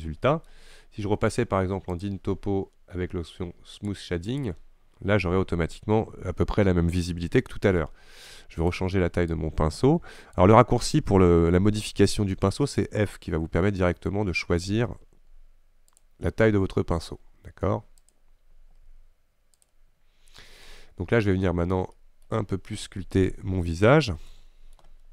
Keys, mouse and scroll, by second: 3.9 click, 4.4-7.9 drag, 7.9-9.5 shift+middle drag, 9.5-12.4 right drag, 12.4 f, 16.8 f, 18.9 f, 20.2-20.9 scroll up 2, 20.9 shift+middle click, 21.6-22.0 scroll up 1, 22.0-23.4 middle drag, 24.4 shift+middle click, 25.0-25.1 scroll up 2.